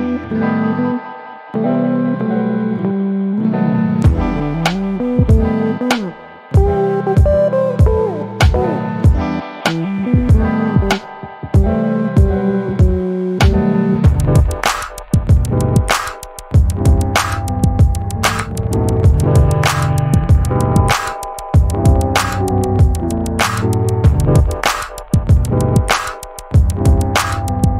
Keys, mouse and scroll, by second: 0.8 click, 1.6 ctrl+d, 2.5 shift+click, 4.9 ctrl+KP_Multiply, 7.7 Delete, 8.9 KP_5, 10.4 shift+click, 13.2 ctrl+g, 14.4-16.3 ctrl+shift+drag, 20.3 ctrl+s, 21.2 click, 21.8 ctrl+s, 23.5 click, 24.3-24.9 ctrl+scroll up 4, 25.1 ctrl+click, 25.9 click, 27.4 ctrl+d.